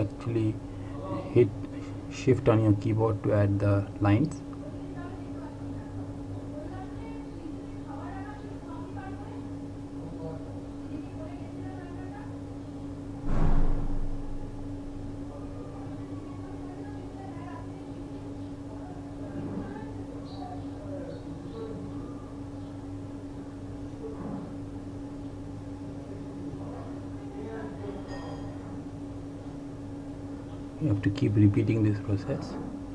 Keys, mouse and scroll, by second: 2.8 click, 11.7 shift+click, 21.4 click, 25.1 shift+click, 30.3 shift+click.